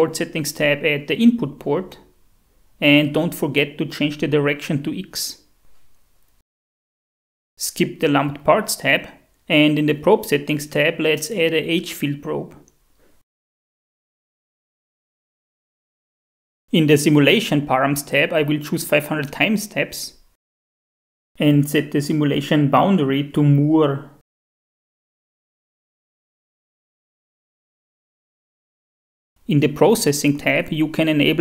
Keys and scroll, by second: 0.8-2.1 typing, 11.7-13.0 typing, 19.3-20.2 typing, 22.7 Tab, 23.5 Down, 24.2 Return.